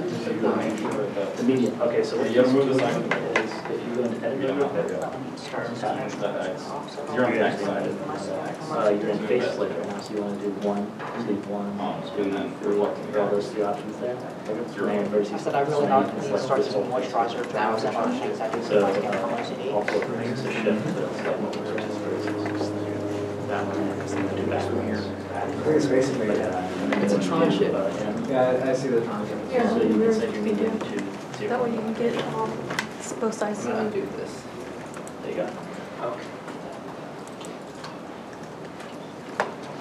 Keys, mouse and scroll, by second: 0.4 y, 0.7 Return, 1.4 middle click, 7.1 z, 7.1 c, 7.7 middle click, 8.6 middle click, 9.2 g, 9.5 y, 10.8 y, 11.3 z, 11.9 middle click, 12.4 3, 14.4 3, 15.3 middle click, 16.1 e, 19.4 g, 19.5 z, 20.4 middle click, 22.4 middle click, 31.8 middle click, 33.7 ctrl+z, 33.8 ctrl+z, 34.1 ctrl+z, 35.0-36.8 ctrl+z, 36.8 middle click, 38.1 middle click.